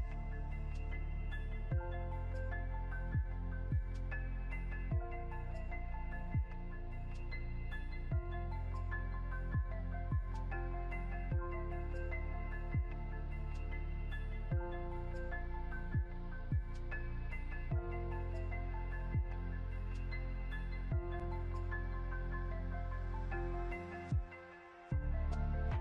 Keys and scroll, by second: 4.6 ctrl+g, 8.1 ctrl+z, 17.0 ctrl+g.